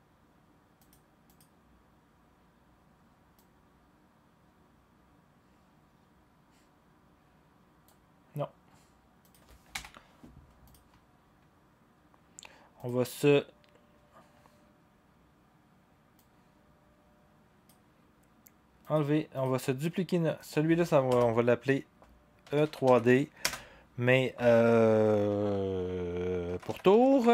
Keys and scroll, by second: 9.7 Delete, 21.1 Return, 22.2-23.3 typing, 26.2-27.3 typing.